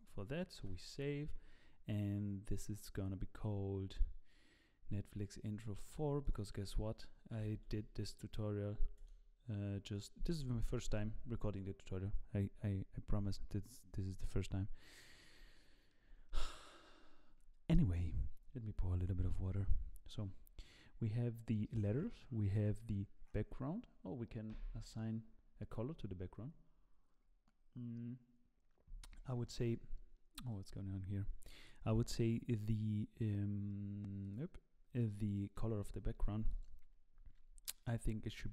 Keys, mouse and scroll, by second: 0.7 ctrl+s, 14.9-15.4 scroll down 2, 15.5 shift+middle click, 35.3 click, 36.2 z, 36.5 click, 37.2-38.5 scroll down 11, 37.6 middle click.